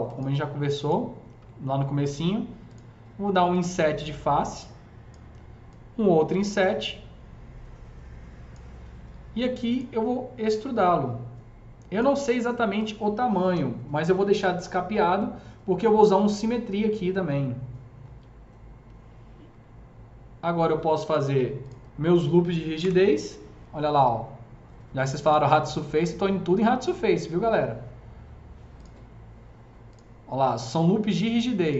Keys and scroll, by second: 1.2 r, 13.4 Delete, 22.7 KP_0.